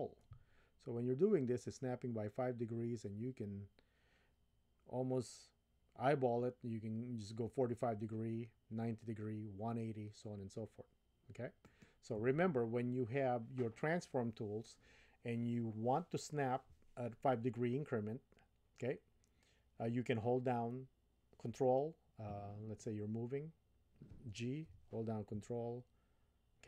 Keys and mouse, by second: 24.7 g.